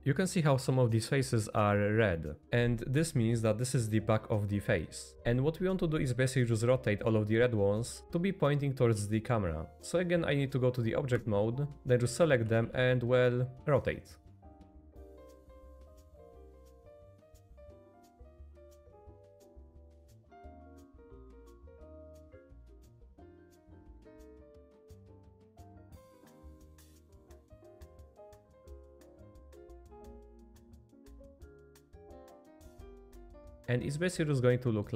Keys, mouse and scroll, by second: 11.1 Tab, 11.7 r, 12.4 r, 14.7-19.2 typing, 15.1 click, 16.8 click, 20.2 r, 21.7 click, 21.8-25.6 typing, 23.3 click, 24.9 click, 25.5 click, 26.6 click, 26.8 r, 27.5 click, 27.6 r, 28.4 click, 28.4 r, 29.2 click, 29.3 r, 30.3-31.5 middle drag, 31.6 middle click, 31.9 middle click, 32.8 middle click, 34.3 middle click.